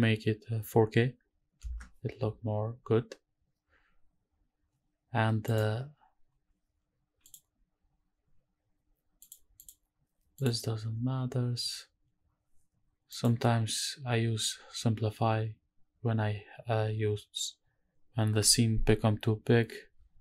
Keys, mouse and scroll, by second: 5.5 click, 6.5-7.2 scroll down 1, 7.2 click, 9.2 click, 9.6 click, 10.3 click, 10.8-13.1 scroll down 3, 13.1 click.